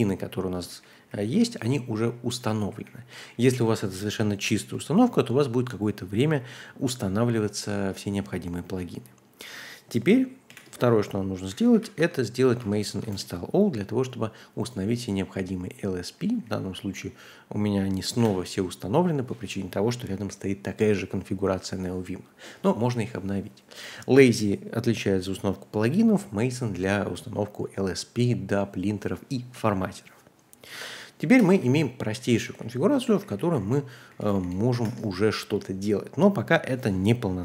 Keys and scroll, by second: 0.1 typing, 0.7 ctrl+d, 0.9 ctrl+d, 1.1 ctrl+d, 2.5 ctrl+u, 2.7 ctrl+u, 2.8 ctrl+u, 8.6 q, 10.5-12.2 typing, 12.4 Tab, 12.6 Tab, 12.9 Tab, 13.1 Return, 16.0-16.9 typing, 18.2 shift+u, 30.7-32.8 typing, 34.1-34.8 typing.